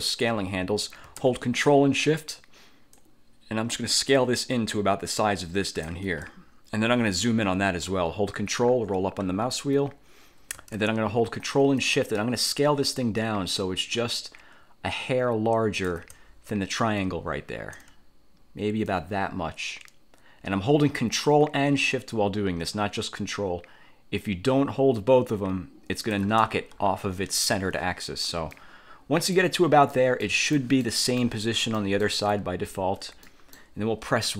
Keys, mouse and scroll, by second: 3.0-6.2 ctrl+shift+drag, 8.5-9.7 ctrl+scroll up 4, 11.9-16.2 ctrl+shift+drag, 16.4-17.0 ctrl+shift+scroll up 3, 19.0-26.5 ctrl+shift+drag, 26.8-27.2 ctrl+scroll down 2, 28.6-29.7 drag, 30.0 click, 30.7 click, 31.4 click, 31.9 click, 32.7-33.0 ctrl+scroll up 2, 33.4 ctrl+click.